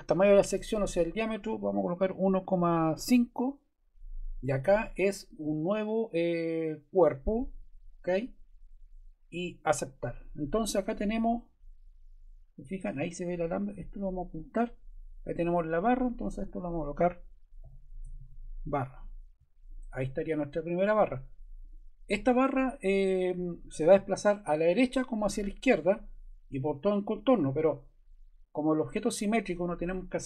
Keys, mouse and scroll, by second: 1.8-3.4 typing, 4.3 click, 9.5 click, 17.3-18.7 typing, 18.9 Return, 19.6 click, 21.6 click.